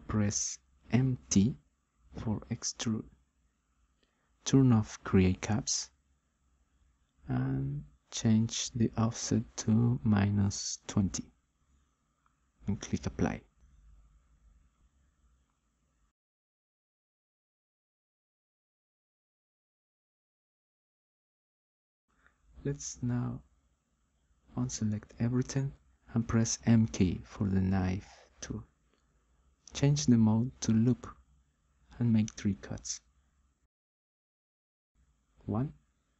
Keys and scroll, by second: 0.0 m, 0.7 t, 11.5-12.5 typing, 25.9 m, 27.0 k.